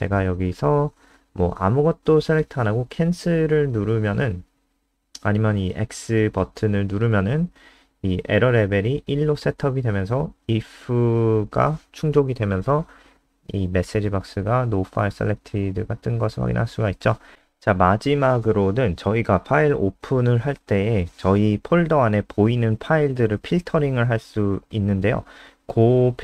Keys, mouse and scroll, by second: 0.3 click, 12.9-13.9 scroll down 4, 15.2 ctrl+c, 15.4 click, 16.0 shift+Home, 16.2 shift+Up, 16.4 shift+Up, 16.7 shift+Up, 17.5 ctrl+v, 17.8 ctrl+s, 21.5 click.